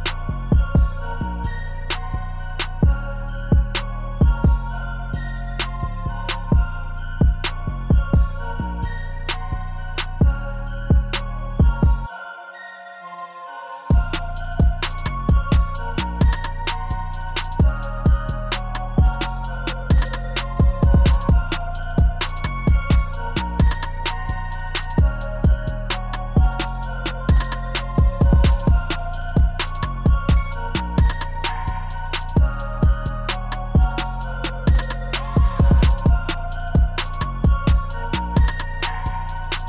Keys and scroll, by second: 2.9 ctrl+z, 16.8 u, 36.5 space.